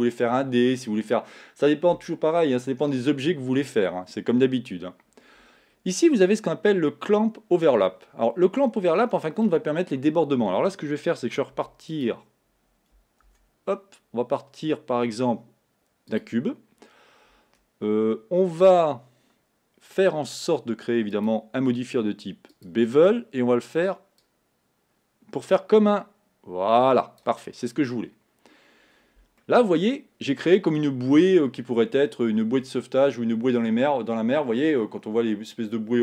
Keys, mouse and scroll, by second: 9.9 scroll down 1, 10.7-11.6 scroll down 4, 11.6 x, 13.3 shift+a, 21.4-24.2 drag, 24.2-27.3 drag, 27.8-29.4 scroll up 3, 29.4-32.5 middle drag.